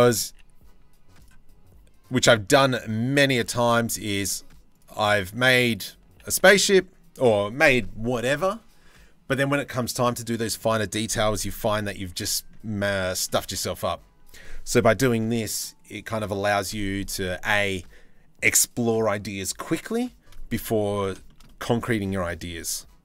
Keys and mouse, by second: 1.8 s, 3.0 s, 3.7 g, 4.6 s, 5.7 g, 12.9 middle click, 20.2 middle click, 20.9 shift+middle click, 21.5 3, 22.8 g.